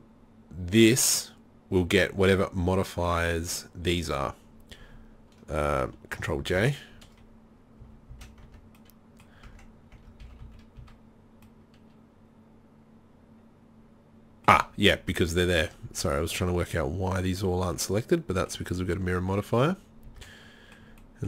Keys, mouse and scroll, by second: 6.4 ctrl+j, 7.8 z, 8.1 z, 8.5 Tab, 9.4 Tab, 10.1 Tab, 10.2 a, 10.4 a, 10.8 a, 15.2 middle click, 20.1 Tab.